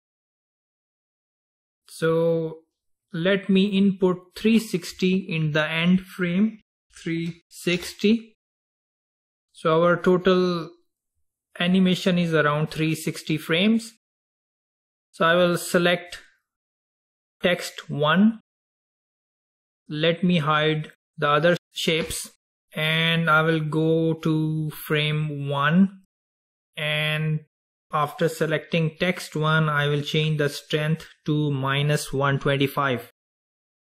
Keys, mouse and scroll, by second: 15.8 click, 17.4 click, 19.3 click, 21.1 click, 23.9-27.4 drag, 31.0-33.8 drag.